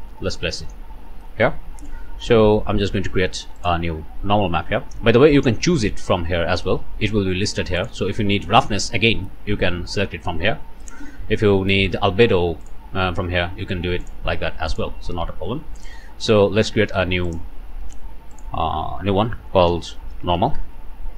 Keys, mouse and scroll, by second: 0.7-1.4 scroll down 1, 1.4 click, 2.3 scroll down 1, 3.6 click, 4.4 scroll down 1, 6.0 click, 7.8 click, 8.2-8.5 scroll down 1, 9.9 click, 12.6 click, 14.0 click, 14.7 click, 15.8 click, 17.3 click, 18.4 click, 19.7-20.6 typing.